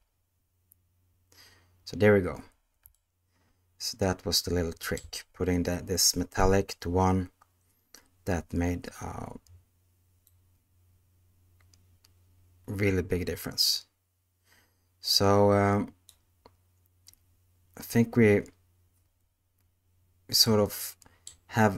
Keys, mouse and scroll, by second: 4.9-10.2 middle drag, 10.2-16.1 drag, 20.5-21.3 middle drag.